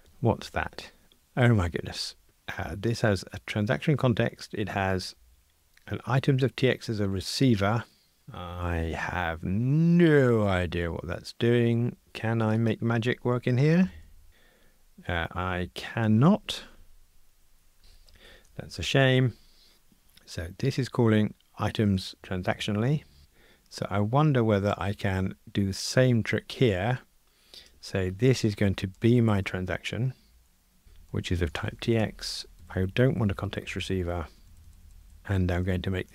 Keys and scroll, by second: 14.3 Return, 17.8 super+z, 32.0 Escape, 34.4 alt+shift+Left.